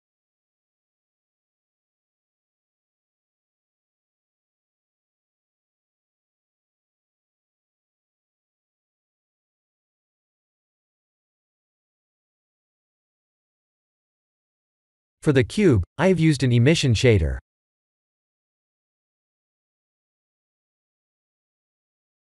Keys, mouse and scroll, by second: 3.4 click, 5.9 click, 7.1 click, 8.4 click, 13.9 click, 18.0 click.